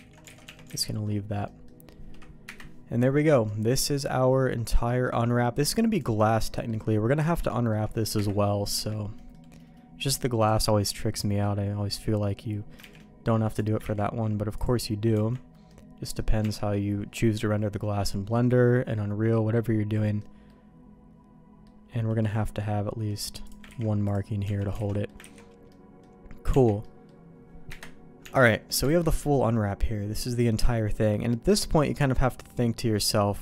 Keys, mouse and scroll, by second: 0.1 ctrl+z, 0.3 alt+a, 0.4 Tab, 0.7 alt+a, 0.8 middle click, 1.4 middle click, 2.4 KP_Divide, 3.4-5.0 middle drag, 5.9 click, 6.5 middle click, 7.5 shift+middle click, 8.1 KP_Divide, 8.7 Tab, 9.1 middle click, 11.9 click, 12.8 shift+g, 13.9 ctrl+e, 15.1 Tab, 15.7 middle click, 16.4 Tab, 19.3 middle click, 20.4-21.6 middle drag, 22.2 middle click, 23.4 click, 23.6 ctrl+e, 24.4 Tab, 24.8 alt+a, 24.8 middle click, 25.2 ctrl+s, 25.6 middle click, 26.5 Tab, 26.8 middle click, 27.7 KP_Divide, 28.2 Tab, 28.9 alt+a, 29.0-33.4 middle drag.